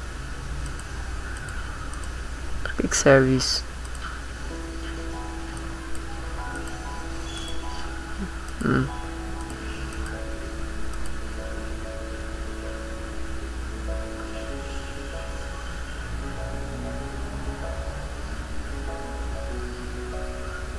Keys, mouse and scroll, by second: 0.7 click, 1.4 click, 1.9 click, 3.5 click, 3.9 click, 5.6 click, 6.6 click, 7.4 click, 8.5 click, 9.4 click, 10.0 click, 10.9 click.